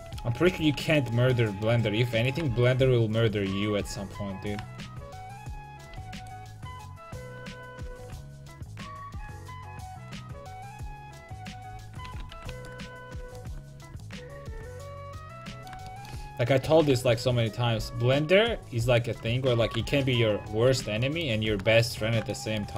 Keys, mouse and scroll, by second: 0.1 a, 0.6 ctrl+t, 0.8 a, 1.0-3.1 right drag, 2.3-4.2 drag, 6.0 a, 6.3-8.0 right drag, 7.0-9.1 drag, 8.2 a, 9.1 middle click, 11.4-12.7 right drag, 11.8 ctrl+x, 12.1 a, 12.4 ctrl+t, 12.7 a, 16.7 a, 17.0 a, 17.8 c, 19.7 alt+j, 20.8 a.